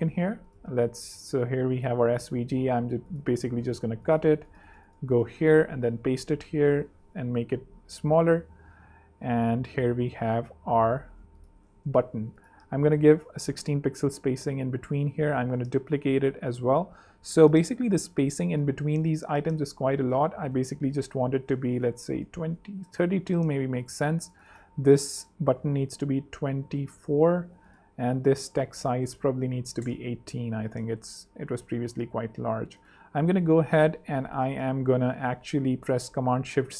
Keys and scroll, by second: 3.3 super+x, 3.5 super+z, 5.5 super+v, 6.4 shift+super+v, 6.6 shift+super+s, 7.2 shift+super+3, 7.3 2, 7.4 Page_Up, 8.4 Left, 8.7 super+3, 9.7 super+2, 12.5-13.3 typing, 13.4 super+3, 14.5 super+2, 15.0 super+d, 15.4 alt+super+z, 16.1 alt+z, 19.3-20.7 typing, 20.8 super+3, 21.5 super+2, 21.9 super+3, 22.1 Home, 22.5 super+3, 23.2 super+2, 23.6 super+z, 24.3 z, 25.4 shift+super+s, 25.9 shift+super+3, 26.0 2, 26.8 4, 26.9 Return, 29.1-30.0 typing, 30.2 super+3, 31.7 super+2, 35.5 shift+super+c.